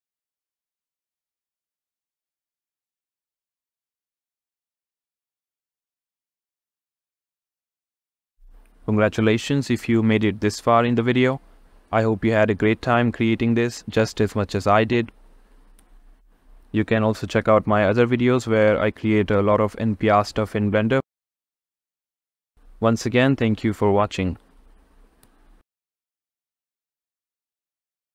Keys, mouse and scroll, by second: 13.7 click, 14.5 click, 15.7-17.5 drag, 19.0 click, 19.3 click, 21.0 click, 23.3 shift+middle click, 23.7 middle click, 25.7-27.2 drag.